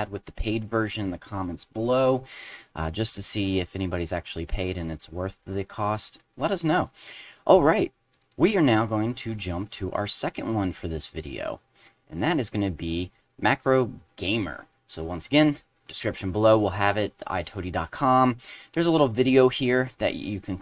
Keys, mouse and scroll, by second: 8.2 click, 9.8 click, 10.7 click, 12.0 click, 20.3 click.